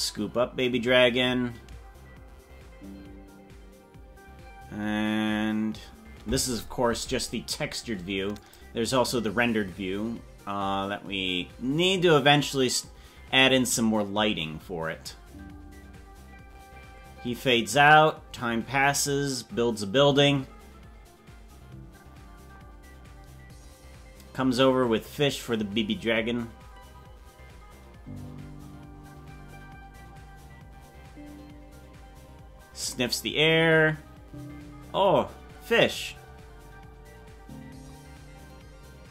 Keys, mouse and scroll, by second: 8.6 click.